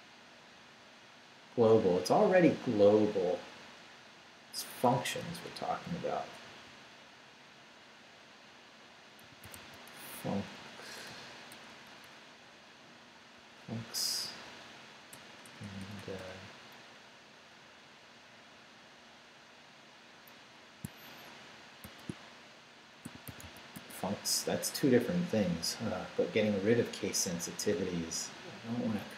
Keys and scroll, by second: 5.5 BackSpace, 6.5 f, 9.0-10.1 typing, 11.5 BackSpace, 13.3 s, 13.8 Down, 14.2 Right, 15.1 BackSpace, 21.8-24.2 typing.